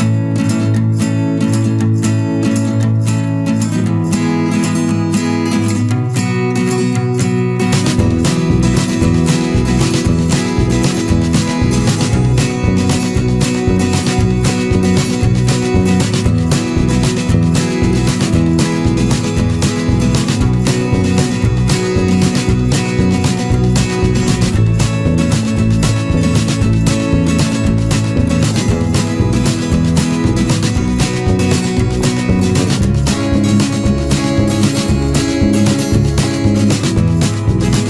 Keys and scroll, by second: 8.6 ctrl+z, 19.3 ctrl+z, 26.3 ctrl+=, 26.8 ctrl+space, 31.8 ctrl+-, 32.2 ctrl+0.